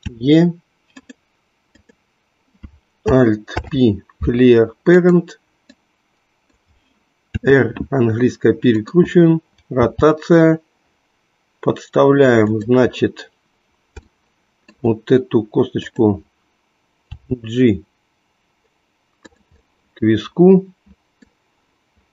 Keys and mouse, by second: 0.0 e, 3.4 alt+p, 5.7 click, 7.3 r, 9.8 g, 14.0-15.9 shift+middle drag, 15.9 click, 17.0 g, 19.3 click, 19.6-21.4 middle drag.